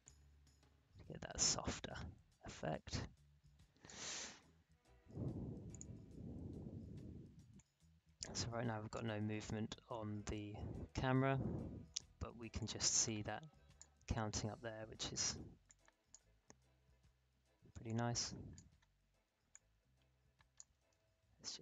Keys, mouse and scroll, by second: 12.5 click, 12.6-14.2 drag, 14.2 alt+scroll up 1, 15.6-20.7 drag, 20.7 space.